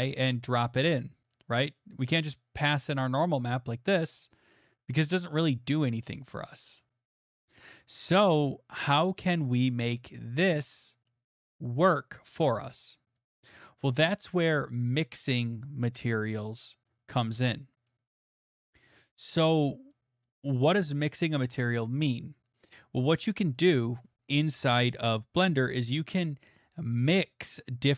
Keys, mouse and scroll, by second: 0.6-2.8 drag, 3.4 click, 7.3 click, 7.9 middle click, 10.5 click, 11.1 middle click, 11.5 middle click, 12.4 middle click, 13.4 click, 14.0 middle click, 15.8 middle click, 17.9 click, 18.3 middle click, 18.9 click, 21.2 middle click, 23.6 click.